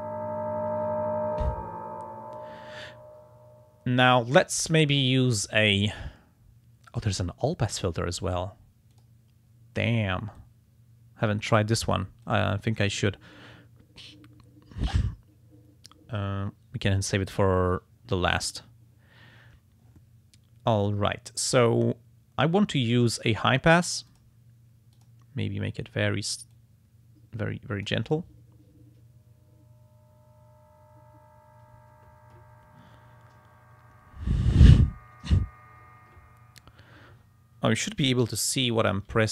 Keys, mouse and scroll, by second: 4.3 click, 8.9 click, 10.4-11.7 drag, 12.2 click, 12.8 click, 22.7 click, 23.7 click, 24.1 click, 24.9 click, 26.5-28.0 drag, 38.5 click.